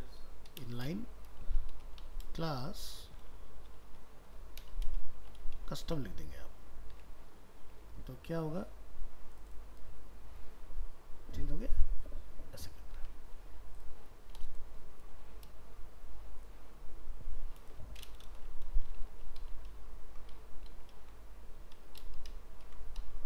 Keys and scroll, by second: 5.9 ctrl+s, 7.0 alt+Tab, 13.0 alt+Tab, 19.7 ctrl+s.